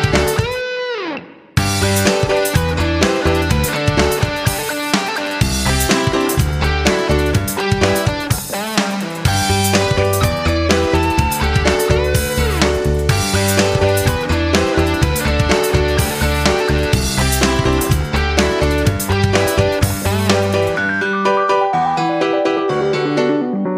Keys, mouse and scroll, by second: 14.7 F9, 15.7-23.7 shift+drag.